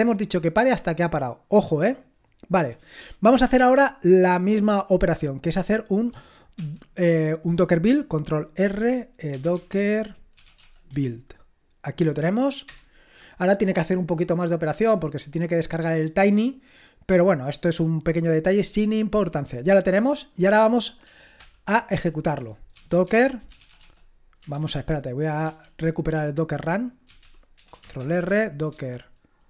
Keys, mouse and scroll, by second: 6.6 ctrl+l, 8.6 ctrl+r, 9.1-11.4 typing, 12.6 Return, 21.4 ctrl+l, 22.5-24.2 typing, 24.6 ctrl+p, 24.7 ctrl+p, 28.0-29.4 typing.